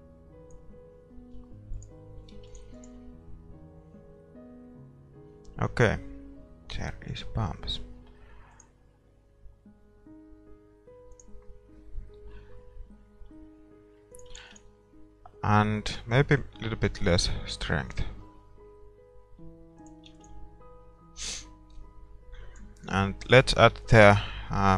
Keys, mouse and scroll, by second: 2.5-5.2 drag, 2.8 ctrl+s, 6.8-9.0 middle drag, 9.0-10.6 drag, 11.4-13.3 drag, 14.6-16.3 drag, 14.7 ctrl+s, 16.4-18.5 drag, 20.2-23.6 drag, 21.1 ctrl+s, 23.6-24.7 middle drag, 24.0 shift+a.